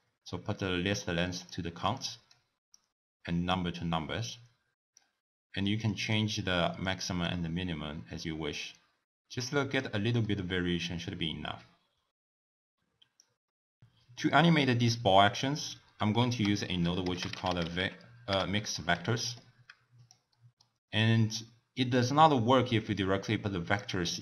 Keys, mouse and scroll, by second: 2.0 click, 2.8 click, 4.9-10.3 drag, 10.3-11.7 middle drag, 11.7-13.0 scroll up 2, 13.2 click, 16.1 ctrl+a, 20.3-21.0 middle drag, 21.0 click, 21.9-24.2 drag.